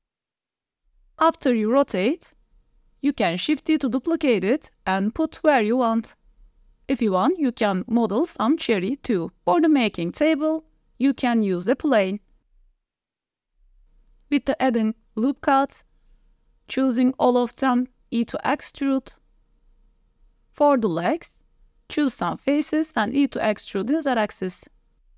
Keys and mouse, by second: 0.3 click, 0.5-3.1 typing, 1.3 click, 1.5 Tab, 2.4 click, 2.7 shift+click, 3.3 drag, 3.7 click, 3.9 click, 4.3-6.4 typing, 4.6 click, 4.9 click, 5.8 middle click, 7.1-7.6 middle drag, 7.7 ctrl+s, 8.2 middle drag, 8.8 shift+a, 10.0 click, 10.5-14.2 typing, 11.3 click, 12.0 click, 12.8 click, 12.9 Tab, 13.0 click, 13.3 ctrl+r, 14.7 middle click, 15.1 ctrl+r, 15.9 s, 16.0 y, 17.3 click, 17.6 middle click, 18.3 middle click, 18.5 a, 18.7 e, 21.3 middle click, 21.9 3, 22.3 click, 22.7 shift+click, 23.5 middle click, 24.2 click, 24.8 e.